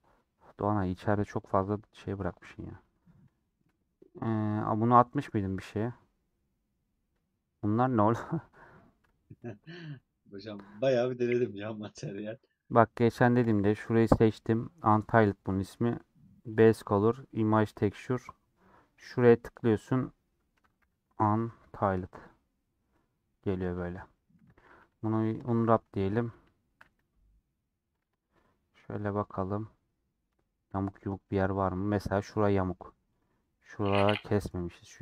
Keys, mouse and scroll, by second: 3.4-13.8 middle drag, 13.8-22.8 drag, 22.8-24.4 middle drag, 24.4 Tab, 26.1 Tab, 28.3-30.5 middle drag, 30.5-30.9 scroll up 2, 31.2 middle click, 31.6 Tab, 31.8-33.0 middle drag, 33.0 click, 33.7 scroll down 2, 33.8 middle click, 34.5 scroll up 2, 34.9 middle click.